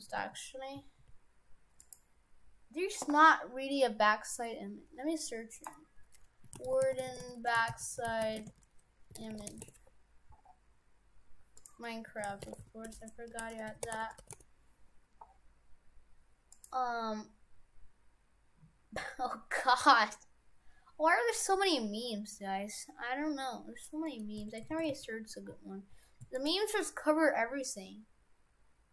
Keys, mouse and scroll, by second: 2.9-5.9 scroll down 1, 24.1 middle click, 24.7 shift+f.